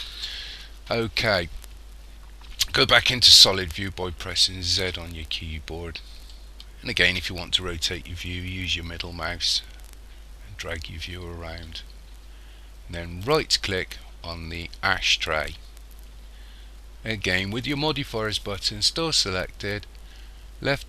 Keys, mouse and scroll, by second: 0.2-1.3 scroll down 6, 4.8 z, 6.3 middle click, 13.3 right click.